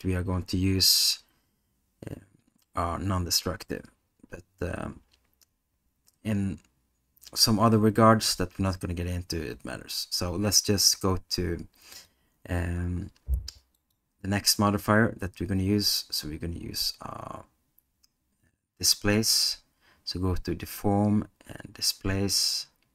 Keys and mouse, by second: 11.9 click, 13.8-22.9 drag.